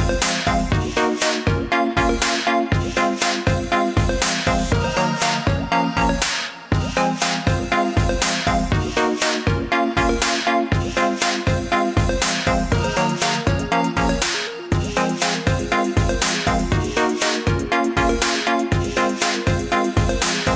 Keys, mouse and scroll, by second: 3.3 click, 11.8 click.